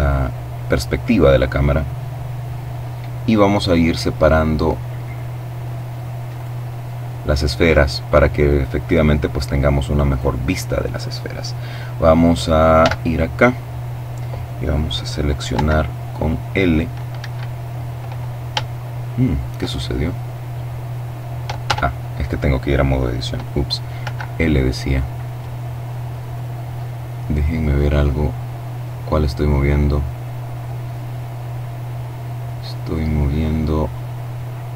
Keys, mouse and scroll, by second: 5.3 right click, 9.1 right click, 11.8 z, 14.5 l, 16.2 Escape, 17.1-17.7 scroll up 3, 17.7 shift+middle click, 20.6 Tab, 24.3-32.9 drag, 33.0-33.6 scroll down 1.